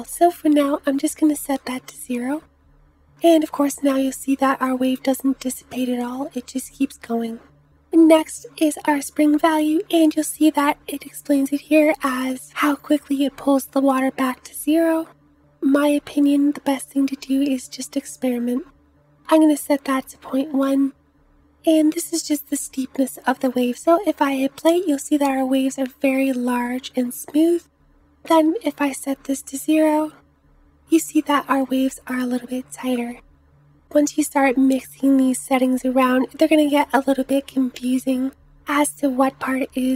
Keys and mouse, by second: 4.0 space, 7.6 space, 24.0 space, 24.9 space, 29.7 space, 31.0 space, 34.2 space, 36.2 space.